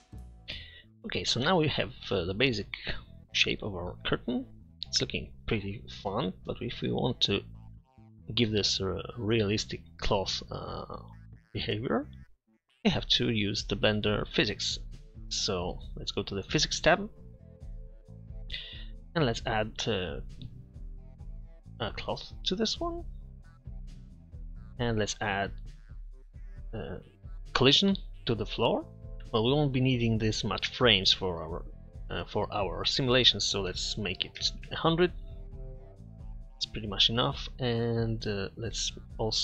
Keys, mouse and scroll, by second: 12.1-13.3 middle drag, 24.7 middle click, 31.6-33.0 drag, 34.7 0.